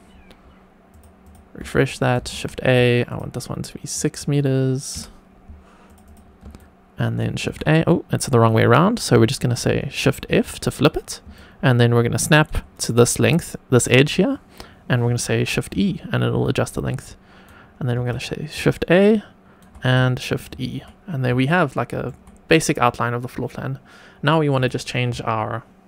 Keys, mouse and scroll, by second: 1.2 click, 1.7-2.2 shift+right drag, 2.2 shift+a, 3.0-5.8 drag, 6.0 click, 6.5-7.4 shift+right drag, 7.4 shift+a, 8.8 scroll up 1, 9.2 shift+middle click, 10.2 shift+f, 11.3 shift+right click, 15.7 shift+e, 16.7 shift+right click, 17.9 shift+a, 18.5 shift+right click, 20.2 shift+e, 21.4-22.0 shift+middle drag, 24.5-25.8 drag.